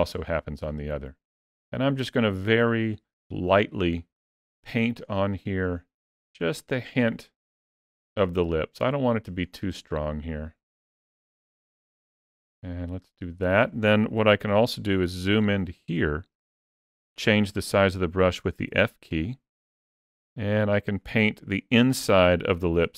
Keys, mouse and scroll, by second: 1.2 click, 1.9 click, 4.8 click, 5.5 click, 6.2 click, 7.9 click, 9.3 click, 10.5 click, 11.8 click, 13.0 click, 14.5 ctrl+middle click, 15.8 ctrl+middle click, 16.5 shift+middle click, 17.8 f.